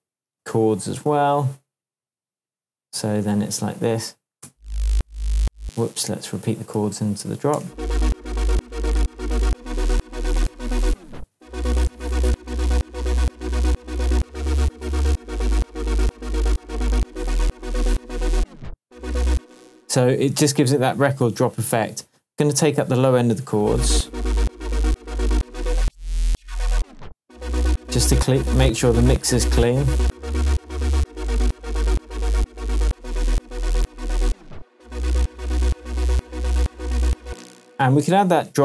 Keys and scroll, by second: 0.3 super+c, 2.8 super+v, 4.4 super+space, 5.3 space, 6.5 super+space, 6.7 super+d, 7.5 super+space, 8.1 space, 19.3 space, 23.4 space, 37.2 space.